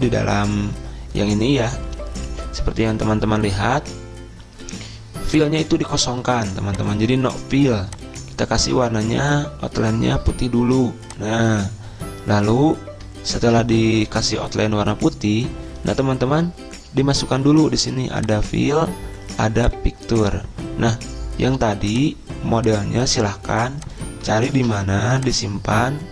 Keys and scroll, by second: 25.2 ctrl+c.